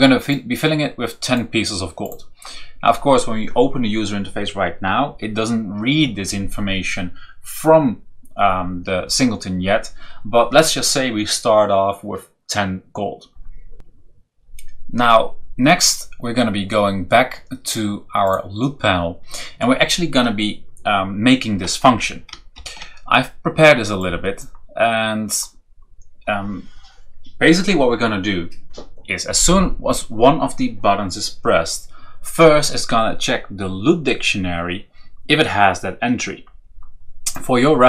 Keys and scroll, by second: 21.8 Return, 22.5 ctrl+v.